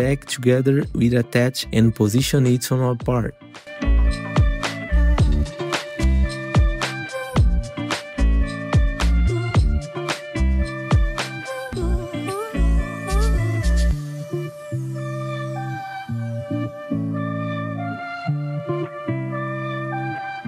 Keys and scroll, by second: 1.9 F4, 3.0 e, 6.7 w, 7.7 r, 8.5 w, 9.6 r, 13.2 w, 14.5 F4, 15.9 r, 17.5 w.